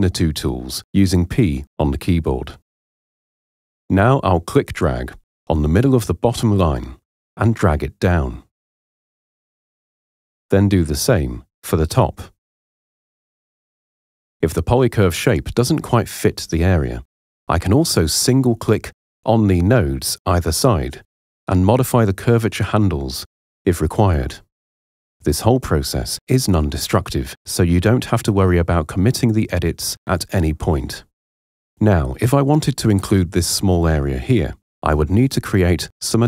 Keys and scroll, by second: 2.1 p.